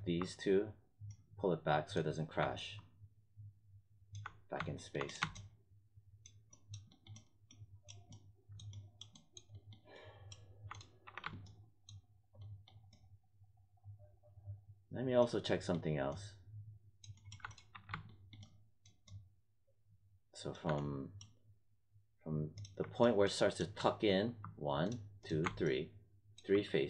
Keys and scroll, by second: 11.0 1, 17.7 1.